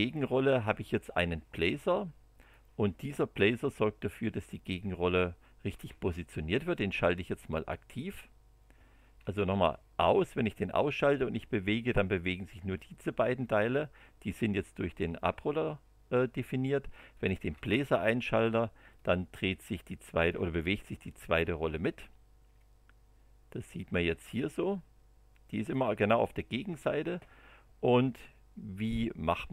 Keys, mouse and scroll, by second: 2.4 click, 5.7 space, 9.2 space, 11.1-14.5 drag, 17.1 click, 17.5 space, 19.0-20.5 drag, 21.2 click, 22.5-25.9 drag, 29.4 click.